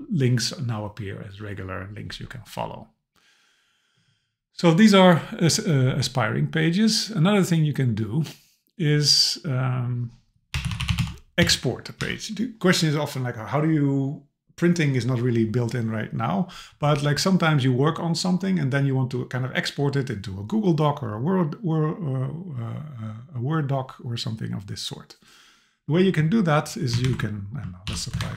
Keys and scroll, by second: 12.0 Left, 27.0 alt+shift+Left, 27.9 super+b, 28.2 super+Right.